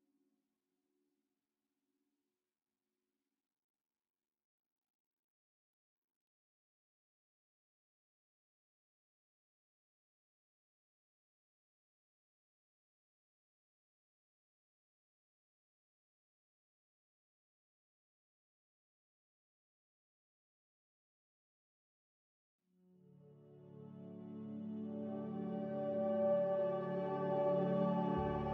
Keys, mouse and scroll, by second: 1.6-2.4 typing, 6.7-7.6 typing, 13.7 b, 14.2 z, 16.9 a, 19.1 z, 20.0 Delete, 21.5 click, 26.1 click.